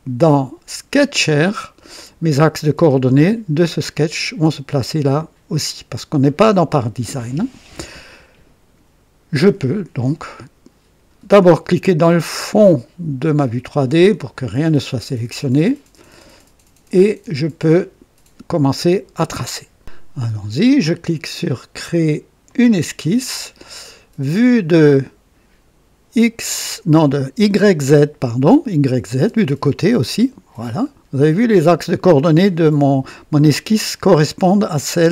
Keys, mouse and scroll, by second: 0.8 click, 13.1 click, 22.4 click, 29.1 click, 29.8 click, 30.8-31.1 scroll up 2, 32.5-32.9 scroll down 2.